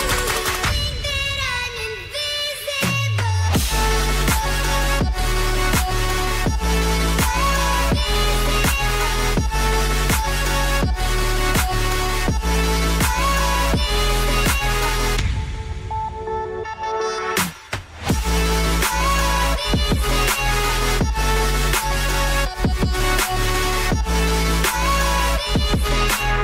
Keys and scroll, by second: 11.4 ctrl+d, 21.8 ctrl+d.